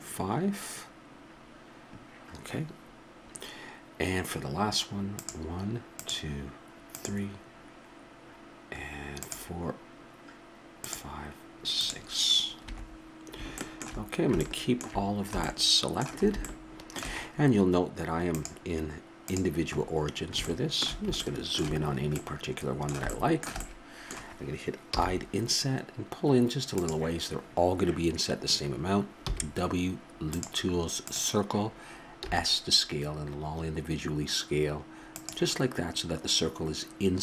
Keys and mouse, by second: 13.6 middle click, 14.4 middle click, 15.5 middle click, 15.9-16.6 middle drag, 16.8-18.3 middle drag, 18.3-20.4 drag, 19.9 middle click, 21.8-22.3 middle drag, 24.9 i, 29.2 w, 32.2 s.